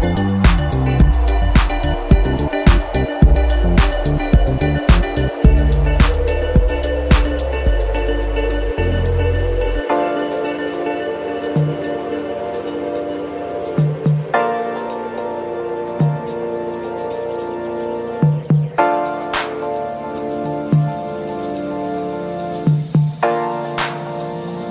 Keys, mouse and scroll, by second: 0.8 click, 1.5 click, 2.5-5.6 middle drag, 6.3-7.6 drag, 7.6-10.1 middle drag, 10.1 KP_1, 11.0-11.3 scroll up 3, 11.3-11.6 scroll down 1, 11.6-14.6 middle drag, 15.0 click, 16.0 shift+click, 17.0 shift+click, 17.8 scroll up 1, 19.7 r.